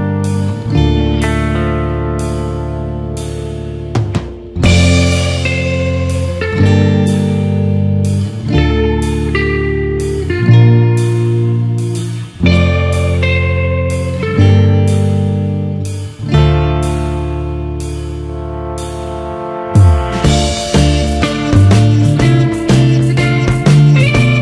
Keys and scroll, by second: 0.7 ctrl+d, 3.1 ctrl+=, 3.8 ctrl+space, 21.8 ctrl+d, 22.5 ctrl+-, 22.8 ctrl+0.